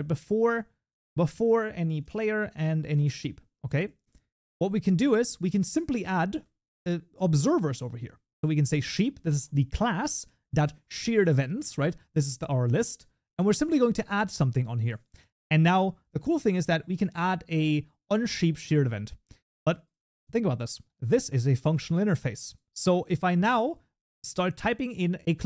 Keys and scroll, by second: 5.4 ctrl+s, 13.3 Tab, 23.4 ctrl+F8.